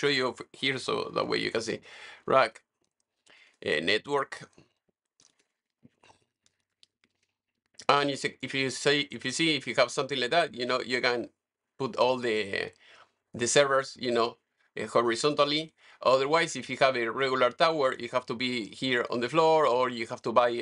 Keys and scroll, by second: 0.0-7.0 typing.